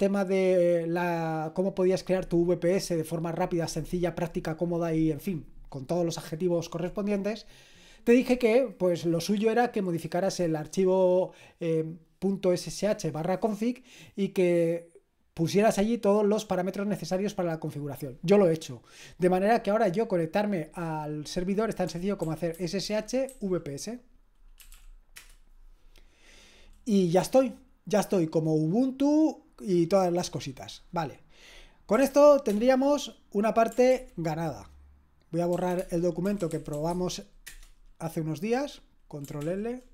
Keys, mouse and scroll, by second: 21.6-23.3 typing, 24.3-25.2 typing, 31.7-32.5 typing, 33.9 ctrl+l, 35.3-37.2 typing, 37.5 Return, 39.4 ctrl+l.